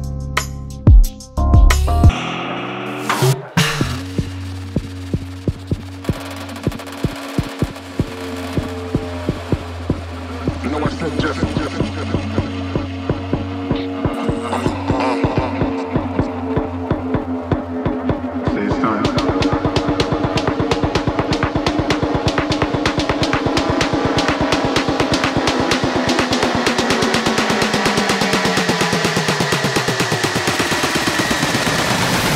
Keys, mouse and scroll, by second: 0.0 click, 0.1 scroll down 11, 0.3-0.8 scroll up 2, 0.8 scroll down 1, 0.9-3.9 middle drag, 4.3 click, 5.4 click, 7.0 d, 7.2-7.5 scroll up 3, 7.5-8.2 scroll down 6, 8.5 click, 8.8 click, 9.6-10.9 drag, 11.2 middle click, 11.4 KP_3, 11.5-11.8 scroll up 4, 11.9 scroll down 4, 12.2 g, 12.7 middle click, 12.8 scroll down 1, 13.0 KP_7, 13.4-14.4 click, 14.5 middle drag, 14.6 scroll up 4, 14.8 middle drag, 14.9 scroll down 1, 15.4 click, 16.1-16.5 middle drag, 16.5 scroll up 2, 16.6 scroll down 1, 16.7-17.0 middle drag, 17.0 KP_3, 17.3 click, 18.1 click, 18.3 middle click, 18.8 click, 20.0 click, 20.1 g, 20.7 click, 20.8 click, 21.2 g, 21.5 scroll down 1, 21.6 middle drag, 21.6-22.1 scroll up 4, 21.7 middle click, 21.9 KP_3, 22.2 middle drag, 22.4 KP_3, 22.6 click, 22.7 click, 23.0 scroll down 1, 23.2 middle click, 23.9-24.4 scroll down 3, 24.4 click, 24.5-24.9 middle drag, 25.0 middle click, 25.3 scroll down 2, 25.4 scroll up 1, 25.5 click, 25.6 middle click, 25.9 click, 26.3 click, 26.4 scroll down 3, 26.4-27.1 middle drag, 27.1 click, 27.2 middle click, 27.3-27.6 scroll up 6, 27.5 middle click, 27.6-28.1 scroll down 5, 27.7 middle click, 28.0 KP_7, 28.3 click, 29.0 click, 29.9 click, 31.0 click.